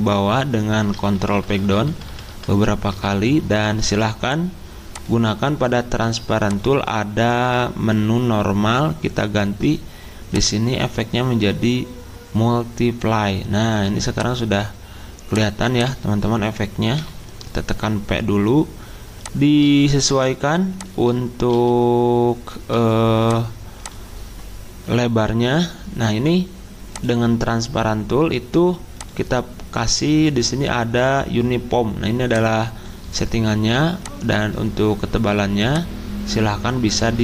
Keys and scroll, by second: 1.1 ctrl+Page_Down, 1.3 ctrl+Page_Down, 1.5 ctrl+Page_Down, 1.6 ctrl+Page_Down, 1.9 ctrl+Page_Down, 17.0 p, 21.5 c, 22.7 b.